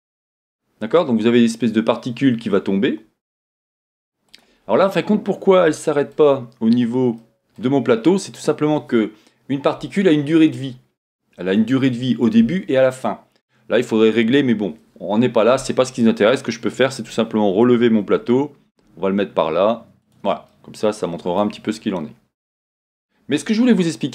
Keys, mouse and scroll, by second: 2.2-2.6 scroll up 3, 4.3 click, 4.7 scroll down 1, 5.7-8.3 shift+middle drag, 8.3-12.1 scroll down 2, 12.1-16.3 middle drag, 12.1 scroll down 1, 16.3-20.5 drag, 17.7 g, 20.5-22.2 middle drag, 21.7-24.1 scroll up 2.